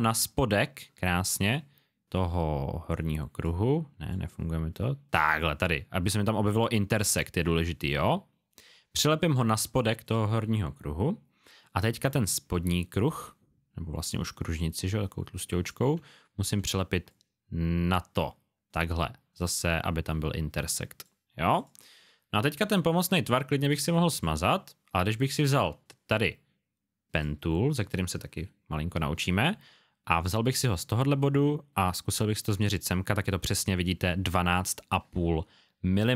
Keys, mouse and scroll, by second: 4.1 click, 10.0 click, 16.2 alt+scroll up 1, 17.1-17.5 scroll up 1, 23.1 alt+scroll down 1, 23.8 click, 24.6-24.9 alt+scroll up 1, 27.1 click.